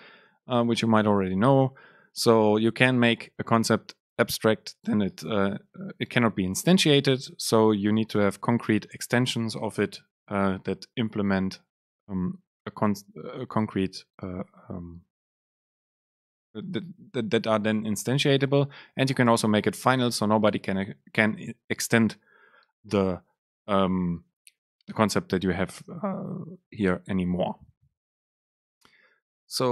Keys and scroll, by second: 29.6 Home.